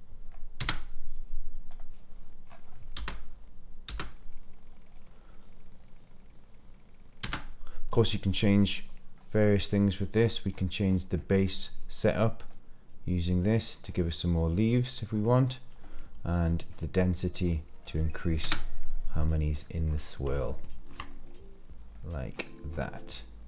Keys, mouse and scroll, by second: 0.6 space, 1.8 click, 2.4 scroll up 2, 2.7 middle drag, 3.9 space, 4.7-5.6 scroll down 2, 5.6 scroll down 1, 7.2 space, 7.9-8.7 scroll down 5, 8.7 middle click, 9.3-9.7 scroll down 2, 9.7 middle click, 10.2-11.2 scroll up 6, 10.2 middle click, 11.2 middle click, 11.4 click, 12.4-15.8 drag, 16.3 middle click, 17.2-18.3 drag, 18.4 space, 19.3-19.6 middle drag, 19.9 scroll up 2, 20.5-20.9 shift+middle drag, 21.1 scroll down 2, 21.9-22.4 middle drag, 22.7 scroll up 2.